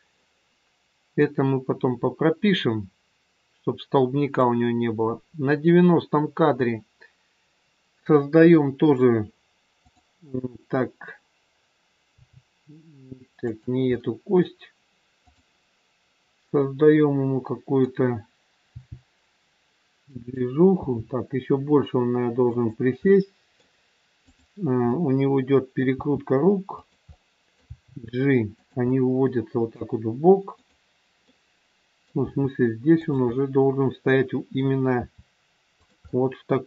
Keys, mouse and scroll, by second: 1.2 click, 6.6 middle click, 9.8 click, 12.1 g, 13.9 scroll up 1, 14.0 middle click, 15.2 click, 16.5 middle click, 18.6 g, 20.7 g, 23.0 middle click, 24.2 click, 25.1 middle click, 25.8 r, 27.0 middle click, 27.6 g, 28.7 scroll up 1, 28.8 middle click, 30.5 click, 31.4 middle click, 32.3 g, 33.3 middle click, 35.0 r, 36.0 middle click.